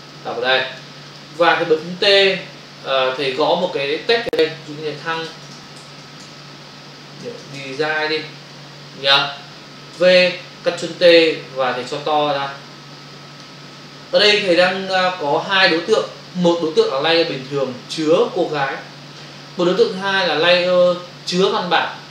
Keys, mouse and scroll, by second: 0.2 click, 1.0 click, 1.9 typing, 3.1 click, 6.3-7.9 typing, 10.0 v, 12.0 alt+click, 14.3 Return, 15.0 click.